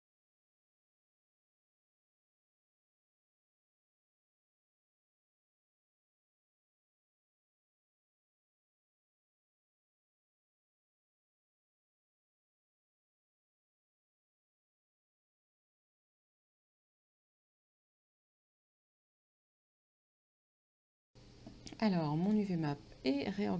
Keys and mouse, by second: 2.7 shift+click, 4.5 click, 5.5 click, 6.6 click, 7.9 click, 8.9 ctrl+x, 10.8 shift+click, 11.9 click, 12.7 Return, 13.6 click, 14.4 Down, 15.9 click, 18.4 ctrl+v, 22.9 click.